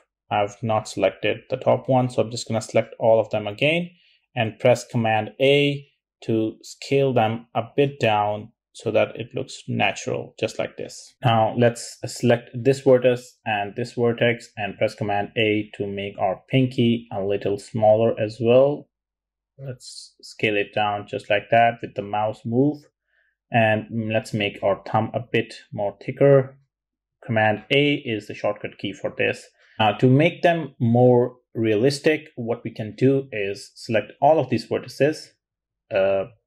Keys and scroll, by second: 2.0 super+z, 4.9 super+a, 16.1 super+a, 24.4 super+a.